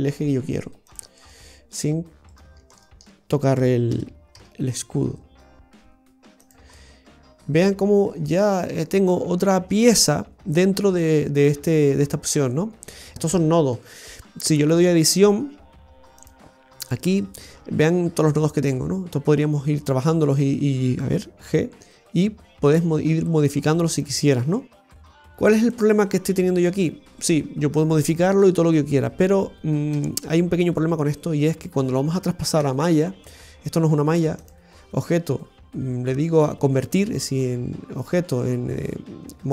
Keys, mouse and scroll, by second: 1.1 right click, 1.6 right click, 2.5 right click, 2.6 shift+right click, 2.8 shift+right click, 3.8 g, 6.7 middle click, 8.5 scroll down 1, 9.0 scroll down 3, 9.0 middle click, 16.1 click, 17.5-17.9 scroll up 4, 20.2 right click, 21.4 g, 24.7-25.2 scroll down 3, 25.6 middle click, 29.9 a, 32.6 Tab, 34.3 click.